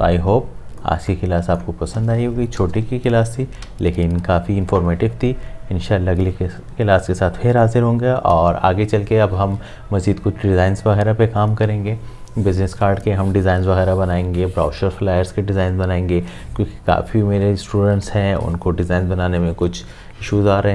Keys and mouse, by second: 0.0 click, 0.3 space, 3.6 v.